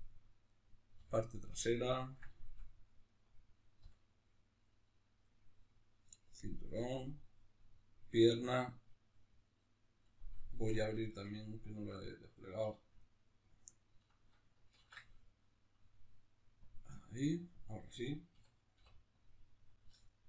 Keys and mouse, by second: 0.5 right click, 1.0 l, 1.7-3.0 middle drag, 3.0 right click, 3.8 l, 5.2-6.6 middle drag, 6.6 right click, 6.9 l, 7.4-13.0 middle drag, 12.6 2, 13.0-14.8 right drag, 14.8 ctrl+e, 17.0-20.0 middle drag, 18.3 a, 20.0-20.2 right drag.